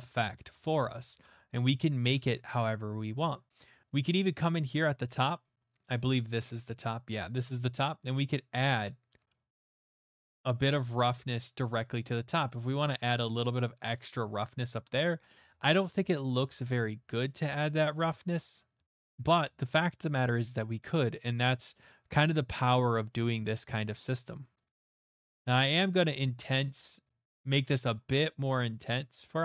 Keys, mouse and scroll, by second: 4.0 ctrl+z, 4.0 middle click, 4.3 middle click, 4.7 middle click, 5.4 click, 5.8 click, 6.8 middle click, 7.7 click, 8.2 click, 8.8 click, 9.3 click, 9.6 click, 9.9 click, 10.2 click, 10.5 click, 10.5-11.2 scroll, 11.3 scroll, 12.1 scroll, 12.7-13.2 scroll, 13.4 middle click, 14.9 middle click, 14.9 middle click, 14.9 middle click, 15.0 middle click, 15.4 ctrl+z, 16.5 ctrl+z, 17.3 ctrl+z, 17.5 ctrl+z, 18.3 ctrl+z, 21.7 middle click, 22.2 click, 23.8 middle click, 23.8 middle click, 24.4 click, 24.6 click, 25.2 click, 25.9 middle click, 26.3 click, 26.7 click, 27.0 click, 27.3 click, 27.7 click, 28.3 middle click, 28.8 click, 29.1 click.